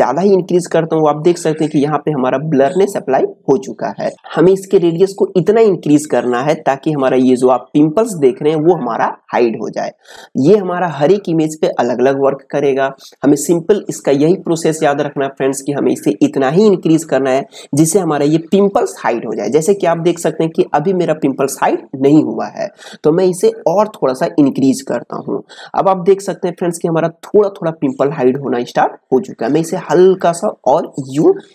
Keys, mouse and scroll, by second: 4.5-7.4 drag, 23.7-29.2 drag, 29.2-31.5 drag.